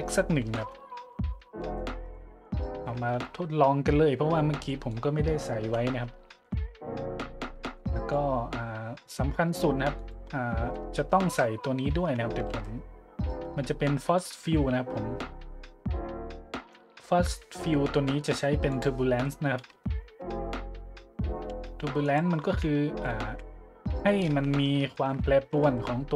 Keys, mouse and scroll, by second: 0.5 KP_1, 0.6 KP_Enter, 1.8-2.5 shift+middle drag, 2.7-3.0 middle drag, 3.1 `, 4.7 middle drag, 5.6 `, 6.3-6.6 shift+middle drag, 6.7 middle click, 7.1 a, 7.6-7.9 shift+middle drag, 8.1 click, 10.0 click, 10.7-11.1 middle drag, 11.2 shift+a, 12.0 `, 12.5 shift+a, 18.7 click, 21.5 g, 22.0-22.4 drag, 22.5 `, 23.3 g, 23.9 click, 24.3 `, 24.9-25.3 shift+drag, 25.3 middle click, 25.5 g.